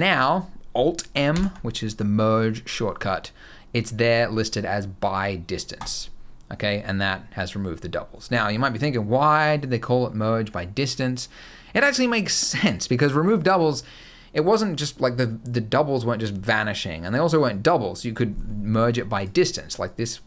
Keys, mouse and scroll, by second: 1.0 alt+m, 18.9 click, 19.6 click.